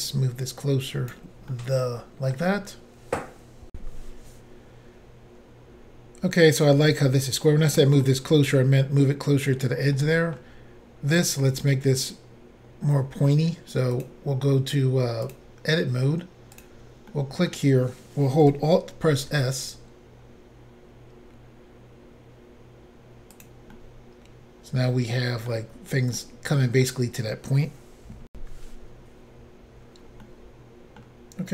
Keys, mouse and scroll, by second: 0.1 click, 1.5 middle click, 5.0 Insert, 7.6 middle click, 9.9 middle click, 14.0 click, 14.0 click, 15.3 click, 15.4 click, 16.6 click, 16.6 click, 17.1 middle click, 19.1 alt+s, 23.4 click, 23.4 click, 23.7 middle click, 26.2 middle click, 29.6 Insert, 30.2 middle click.